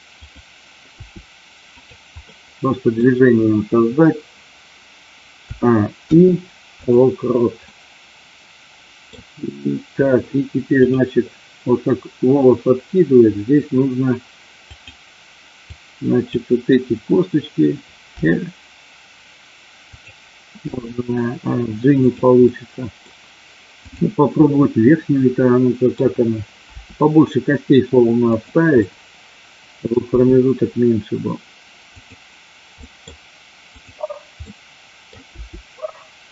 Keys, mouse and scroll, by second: 0.2 click, 1.5 r, 1.8 click, 2.2 middle click, 5.4 a, 5.9 i, 7.7-9.0 middle drag, 10.9 click, 14.7 click, 15.6 click, 18.1 r, 19.9 click, 20.6 g, 21.9 click, 22.5 middle click, 23.7 click, 24.2-25.9 middle drag, 26.8 r, 28.3 click, 28.8-29.9 middle drag, 31.5 r, 31.9 click, 32.8 middle click, 33.6 click, 34.4 middle click, 35.3 r.